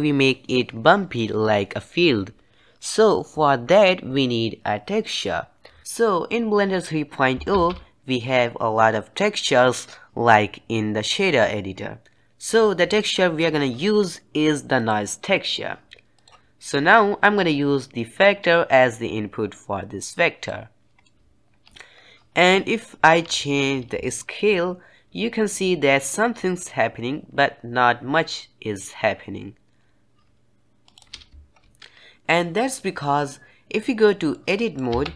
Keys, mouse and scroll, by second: 7.4 shift+a, 16.5 middle click, 16.5 ctrl+z, 17.3-20.4 drag, 20.9 middle click, 21.8 scroll up 1, 24.0-27.0 shift+drag, 34.2 middle click, 34.8 Tab.